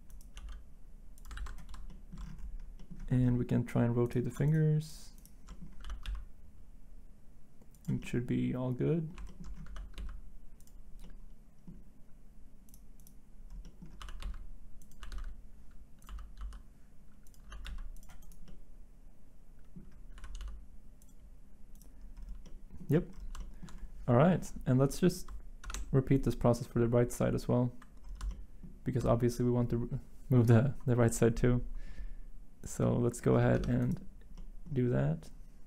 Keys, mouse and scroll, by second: 0.4 g, 1.4 ctrl+z, 5.8 r, 6.0 x, 9.7 r, 14.0-15.1 typing, 16.1-16.4 typing, 17.4 typing, 20.2 typing, 25.3 typing, 25.6 ctrl+Tab, 33.6 Tab.